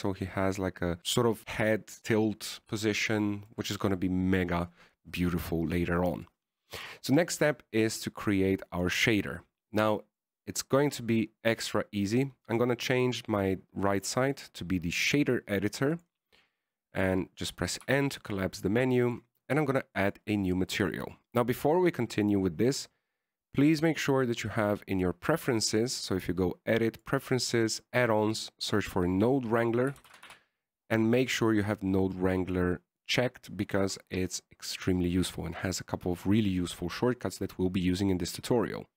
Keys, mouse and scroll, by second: 4.2 shift+middle click, 11.3 click, 13.7 click, 15.2 click, 17.9-18.3 scroll down 2, 19.2 n, 20.4 click, 21.3 click, 22.0 middle click, 22.4-23.2 scroll up 1, 23.2-23.6 scroll up 5.